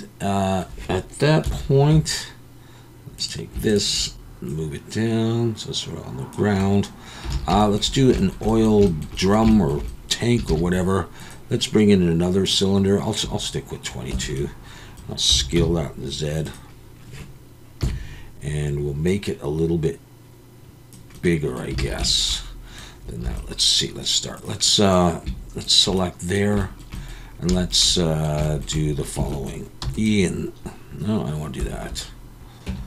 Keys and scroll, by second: 1.4 KP_1, 7.3 alt+a, 10.5 shift+a, 14.1 Tab, 15.3 s, 15.5 z, 17.8 KP_3, 21.8 alt+a, 23.2 3, 29.8 w, 31.6 Escape, 32.7 Tab.